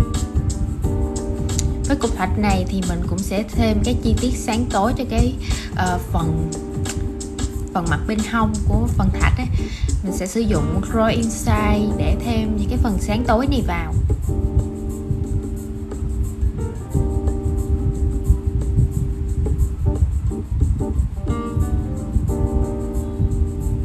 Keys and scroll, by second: 1.1 shift+super+v.